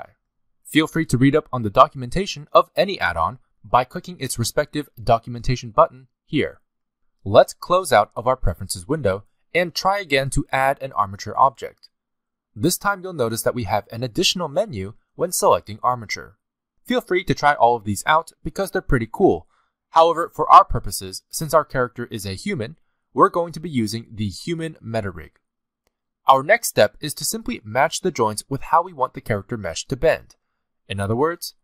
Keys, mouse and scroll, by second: 11.0 click, 26.7-27.0 scroll down 2, 28.7 scroll down 2.